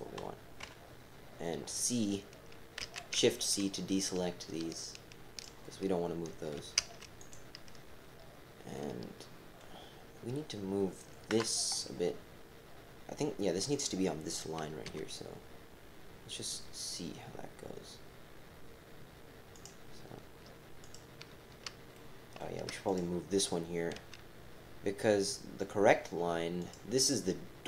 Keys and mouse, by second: 0.6 KP_7, 2.8 c, 8.7 click, 11.3 KP_7, 14.8 g, 19.5 click, 20.8 click, 22.1 shift+click, 22.8 click, 23.9 g.